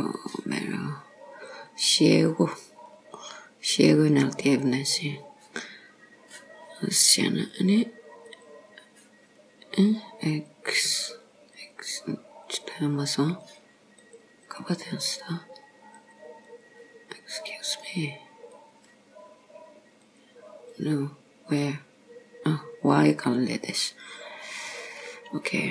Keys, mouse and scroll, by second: 0.2 click, 1.5 click, 7.5 click, 8.4 click, 10.4 click, 10.9 click, 11.6 click, 12.5 click, 13.5 click, 14.1 click, 14.5 click, 16.0 click, 16.6 click, 17.9 click, 18.6 click, 20.1 click, 20.8 click, 21.7 click, 24.7 click.